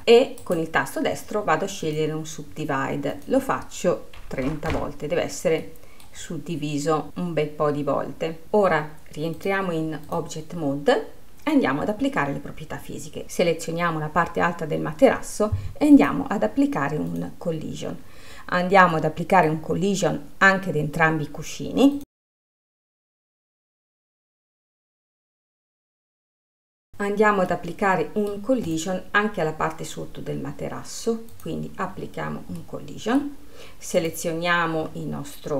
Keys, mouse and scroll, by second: 0.7-3.5 right drag, 10.6-12.8 drag, 16.5 click, 17.6-19.5 drag, 19.5-22.3 middle drag, 22.3 click, 22.9 click, 24.5 click, 25.1-26.9 middle drag, 28.0-29.2 middle drag, 29.2 click, 31.8 click, 32.5-33.1 scroll down 3, 33.1-34.4 middle drag, 34.4 click.